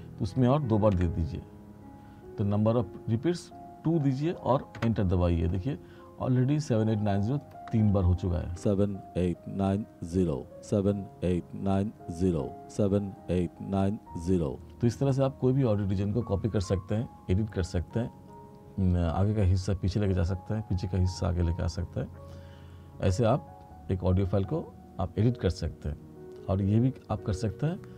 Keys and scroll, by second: 1.1 2, 4.9 Return, 8.5 space.